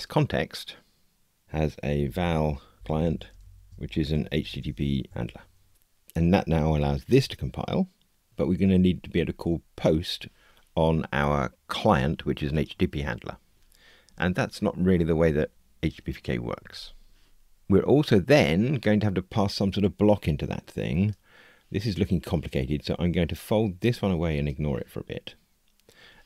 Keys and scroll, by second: 5.7 Escape.